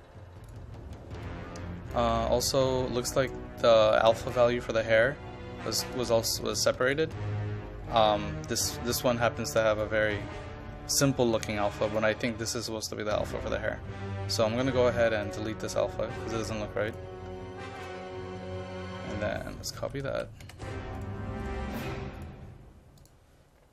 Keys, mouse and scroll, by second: 15.3 right click, 16.9 click, 19.8 ctrl+a, 20.1 ctrl+c, 20.4 ctrl+v, 21.0 click, 21.4 right click, 22.2-23.7 drag.